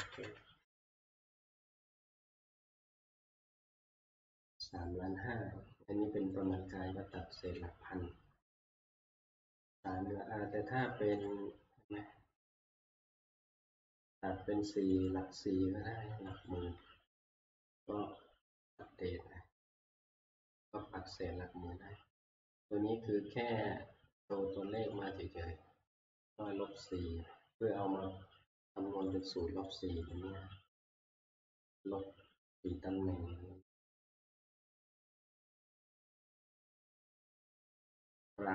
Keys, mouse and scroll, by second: 0.0 ctrl+Page_Down, 0.2 ctrl+Page_Down, 1.4 ctrl+Page_Down, 6.4 click, 11.4 click, 13.9 click, 15.1 click, 16.5 click, 18.8 click, 21.5-27.2 drag, 29.1 click, 29.8 click, 30.1 click.